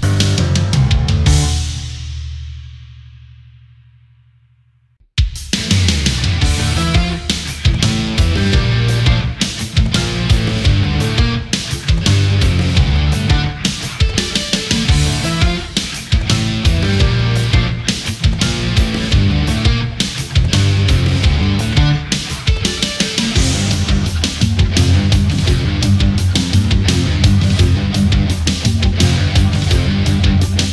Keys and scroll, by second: 11.8 space, 16.9 space, 17.4 ctrl+z, 17.7 space, 22.9 ctrl+z.